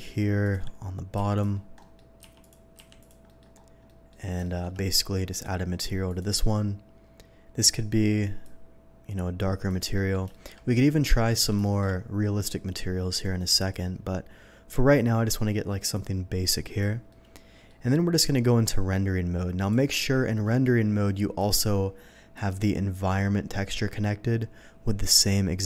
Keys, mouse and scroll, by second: 0.4 click, 1.2 s, 1.3 click, 1.7 middle click, 2.4 click, 2.9 click, 2.9 s, 3.8 middle click, 4.4 shift+middle click, 5.3 click, 6.0 click, 8.4-9.6 drag, 9.9 middle click, 10.2 shift+middle drag, 11.0 shift+middle click, 11.6 shift+middle click, 13.0-13.7 shift+drag, 14.3 shift+middle click, 15.9-16.7 drag, 17.0-17.6 middle drag, 19.5 click, 21.3 click, 22.3 click.